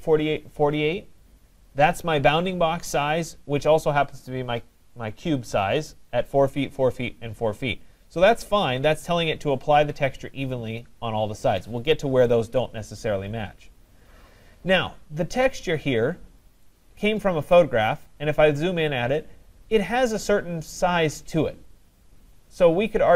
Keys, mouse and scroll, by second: 16.2 middle click, 16.3 middle click, 17.0 right click, 17.4 middle click, 17.5 middle click, 18.1 middle click, 18.2 middle click, 19.1 middle click, 19.2 middle click, 20.0 middle click, 21.3 middle click.